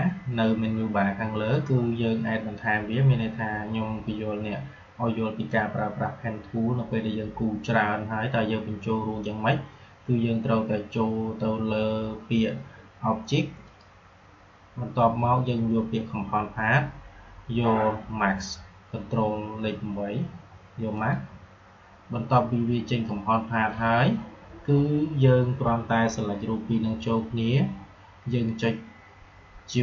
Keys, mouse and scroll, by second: 13.6 click, 13.8 typing, 20.9 click, 20.9 typing.